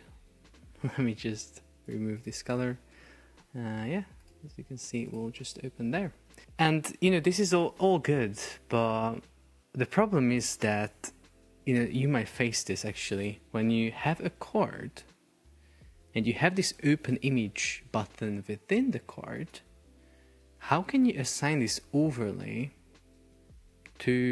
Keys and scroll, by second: 2.5 Escape, 3.0 super+p, 7.3 Delete, 11.8 super+é, 14.1 super+é, 17.6 super+p.